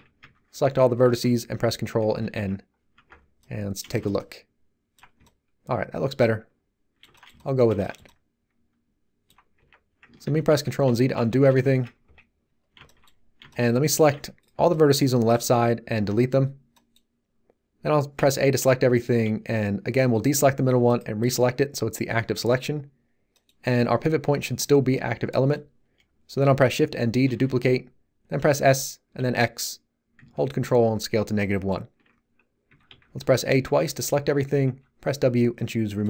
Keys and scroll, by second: 2.1 ctrl+n, 2.9 Tab, 9.5 Tab, 10.2 ctrl+z, 12.0 1, 14.1 z, 14.5 b, 15.9 x, 18.1 a, 27.2 shift+d, 28.4 s, 29.2 x, 32.6 a, 34.6 w.